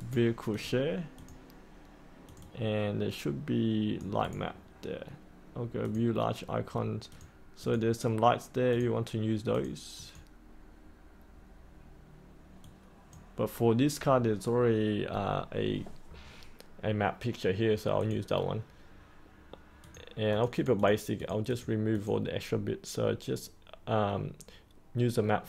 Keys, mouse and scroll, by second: 0.5-4.2 drag, 4.2 right click, 5.8-13.9 drag, 19.0-25.4 drag.